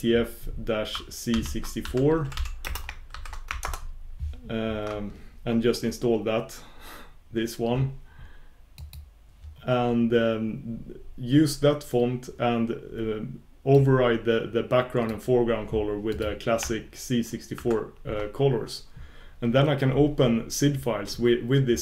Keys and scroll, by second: 4.7 ctrl+super+Return.